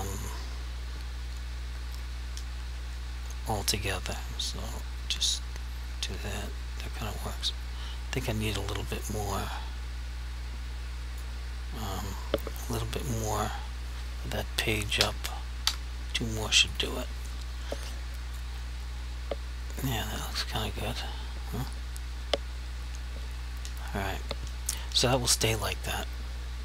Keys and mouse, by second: 12.0 ctrl+z, 13.6 g, 15.0 Page_Up, 16.8 right click, 18.5 click.